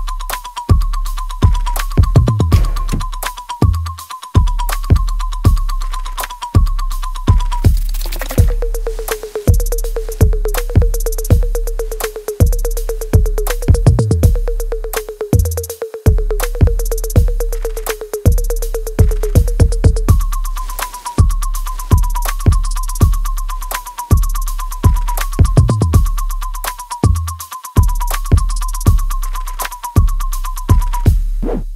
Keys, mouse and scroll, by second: 1.0 click, 3.6 right click, 4.5 click, 4.8 alt+right click, 5.7 space, 6.6 alt+middle click, 7.2-8.8 alt+right drag, 8.8 click, 10.6-13.1 right drag, 13.1 alt+right click, 14.2 alt+middle click, 14.5-16.0 alt+right drag, 16.0 click, 16.8 w, 18.4-24.2 drag, 24.2-31.3 drag, 31.3-31.7 drag.